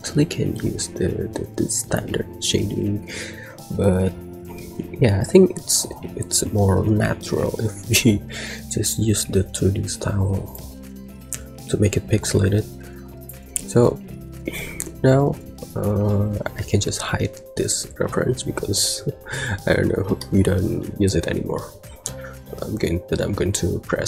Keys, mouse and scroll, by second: 10.4-13.1 drag, 15.6 click, 20.1 shift+middle drag.